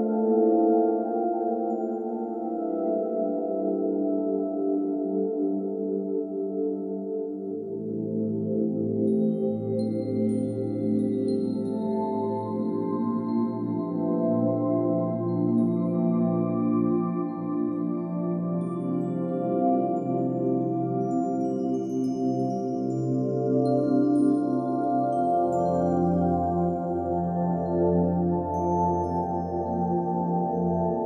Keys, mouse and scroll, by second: 0.0 middle click, 0.2 shift+middle click, 0.3 scroll up 1, 0.3 middle drag, 0.4 shift+a, 0.9 scroll up 3, 0.9 shift+middle click, 1.1 click, 1.8 scroll down 5, 1.9 shift+middle drag, 2.1-5.1 typing, 2.5 click, 3.0 shift+middle click, 3.3 scroll up 3, 3.5 scroll down 2, 3.6 shift+middle click, 3.7 click, 3.9 shift+middle click, 3.9 click, 4.2 middle click, 4.6 middle click, 5.0 click, 5.6 shift+middle click, 5.7 scroll up 2, 5.8 click, 6.0 click, 6.1 shift+middle click, 6.2 scroll up 1, 6.3 scroll down 1, 6.5 click, 6.6 shift+middle click, 6.6 scroll up 1, 6.7 r, 7.4 s, 7.7 click, 7.8 middle click, 8.0 scroll down 2, 8.0-8.5 middle drag, 8.5 scroll up 1, 8.5 shift+middle click, 9.1 click, 9.3 click, 10.6 click, 10.7 middle click, 11.0 click, 12.3 s, 12.6 click, 12.8 middle click, 12.8 click, 12.8 scroll down 1, 12.9 shift+middle click, 13.6 click, 13.7 scroll up 2, 13.7 shift+middle click, 13.8 click, 13.9-15.3 typing, 14.3 shift+click, 14.4 shift+middle click, 15.2 click, 15.5 shift+click, 15.6 scroll up 1, 15.7 click, 15.9 scroll down 2, 15.9 middle drag, 16.1 ctrl+s, 16.2 shift+middle drag, 16.4-17.6 typing, 16.8 click, 17.3 click, 17.9 click, 18.4 click, 18.6-21.2 typing, 18.9 click, 19.2 click, 19.6 click, 19.6 scroll up 2, 20.1 click, 20.3 click, 20.8 click, 21.1 click, 21.8 click, 21.9 middle click, 21.9 scroll down 2, 22.0 middle click, 22.3 scroll up 3, 22.4 click, 22.4 a, 22.5 g, 22.9 click, 23.3 scroll down 2, 23.3 middle click, 23.5 click, 23.5 middle click, 23.6 click, 24.0 scroll up 2, 24.1 scroll down 1, 24.1 shift+click, 24.1 shift+middle click, 24.5-27.3 typing, 25.2 click, 26.5 click, 27.2 click, 27.8 middle click, 28.3 scroll down 1, 28.4 shift+middle click, 28.7 click, 28.8 middle click, 28.9 click, 29.0 scroll up 1, 29.0-30.6 shift+middle drag, 30.8 click, 31.0 click, 31.0 scroll up 1.